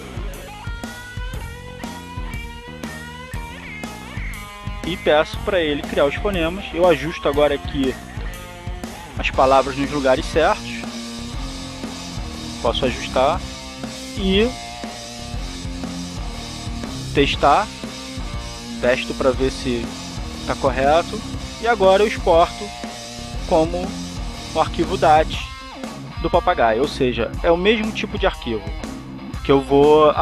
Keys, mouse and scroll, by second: 0.7-5.6 typing, 6.9 click, 8.6-12.1 drag, 13.1-15.4 drag, 16.6-18.0 drag, 19.0 click, 23.0 click.